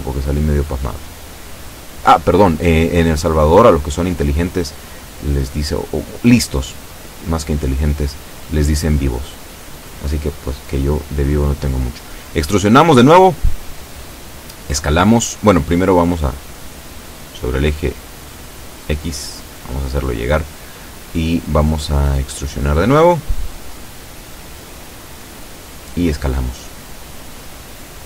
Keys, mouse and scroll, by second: 0.2 click, 1.1-2.8 drag, 3.2 a, 3.5 b, 3.9 click, 4.7-5.8 drag, 6.1 shift+middle click, 6.6 shift+scroll up 1, 6.8 shift+middle click, 6.9-7.3 shift+scroll down 2, 7.1 shift+middle click, 7.3-9.5 middle drag, 8.6 a, 9.0 b, 9.6 click, 11.0 e, 12.9 click, 13.6 a, 13.9 b, 14.6 click, 15.8-17.6 drag, 18.2-19.3 drag, 19.9 b, 20.4-21.8 drag, 21.8 e, 24.4 click, 25.3 s, 26.5 click, 27.1 shift+middle click.